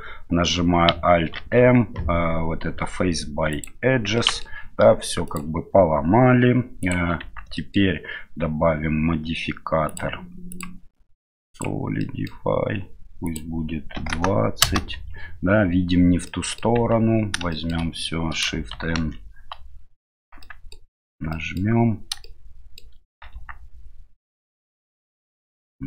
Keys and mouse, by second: 1.4 alt+m, 4.2 middle click, 5.3-7.0 drag, 7.2 Tab, 7.6 middle click, 9.9 click, 10.5-11.6 drag, 12.0 middle click, 13.3-15.2 drag, 16.3 middle click, 16.8 Tab, 17.5 shift+middle click, 19.0 shift+n, 20.4 middle click, 21.0 Tab, 21.3 middle click, 22.2 shift+middle click, 23.3 Tab.